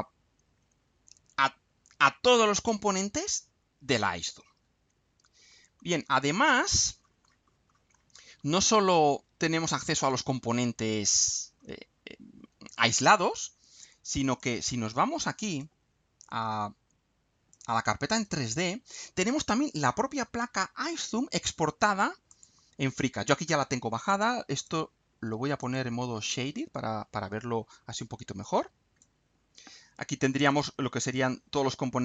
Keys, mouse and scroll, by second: 5.5-9.2 scroll down 2, 10.9-12.1 scroll down 4, 14.4 click, 15.5 click, 17.5 click, 18.1 click, 22.3 click, 24.6 click, 25.6 click, 28.4-29.2 drag, 30.5 click.